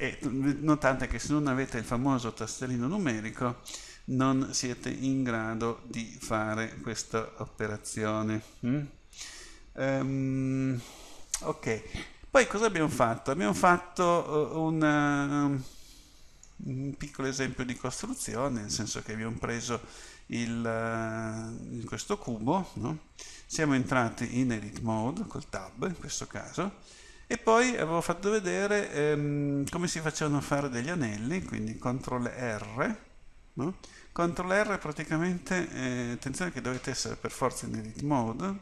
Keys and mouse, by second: 13.7 middle click, 18.3-19.8 middle drag, 20.1 middle click, 23.7 Tab.